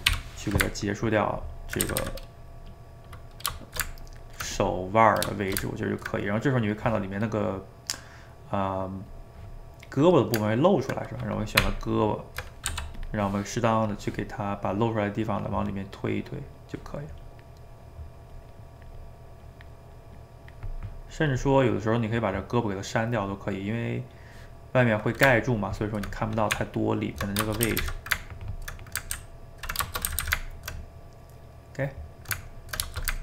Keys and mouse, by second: 0.1 /, 0.7-1.9 ctrl+middle drag, 1.9 a, 2.0 a, 2.6 middle click, 3.6 shift+right click, 3.9 ctrl+middle click, 4.6 click, 4.9 middle click, 5.4 shift+right click, 5.7-9.2 ctrl+middle drag, 9.2 click, 9.8-11.6 middle drag, 11.6 Tab, 12.7 f, 13.9-15.6 drag, 15.6 middle click, 16.2 click, 16.5 middle click, 17.1 click, 17.6 middle click, 18.3 click, 18.6 middle click, 19.4 click, 19.8 middle click, 20.2 click, 20.8 middle click, 21.1 click, 21.6-26.6 middle drag, 26.6 Tab, 27.5 shift+middle click, 27.7 a, 27.9 a, 28.0-29.1 ctrl+middle drag, 29.1 ctrl+s, 29.9 shift+middle click, 30.1 a, 30.2 a, 30.4-33.2 ctrl+middle drag.